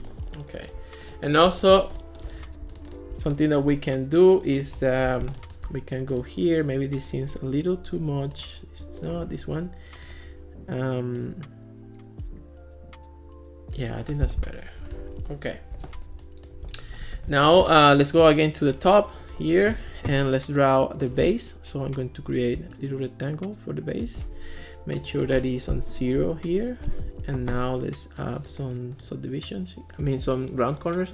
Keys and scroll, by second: 14.3 Escape, 25.7 0, 25.9 Return.